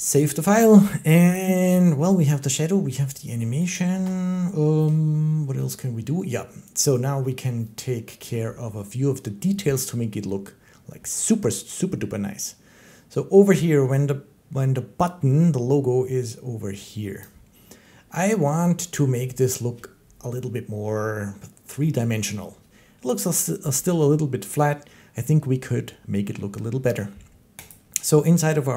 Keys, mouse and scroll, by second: 3.5 click, 17.0 click, 18.3 shift+middle click, 27.5 click.